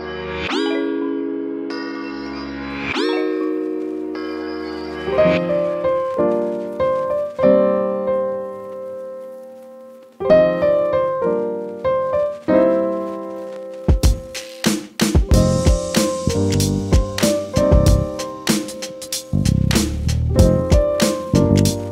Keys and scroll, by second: 3.7 ctrl+z, 4.3 ctrl+=, 5.0 [, 5.1 [, 6.5 ], 7.4 ], 7.5 ], 7.6 ], 9.0 ctrl+z, 20.1 ctrl+z.